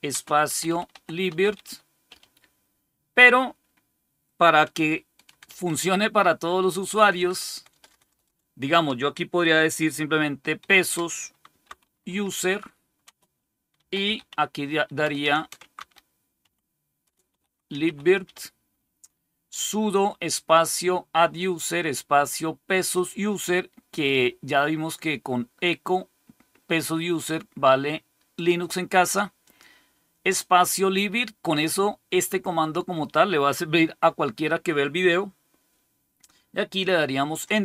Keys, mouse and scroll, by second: 0.0-2.5 typing, 5.1-8.1 typing, 10.5-18.7 typing, 26.7-28.3 drag, 29.3 click, 37.5 Return.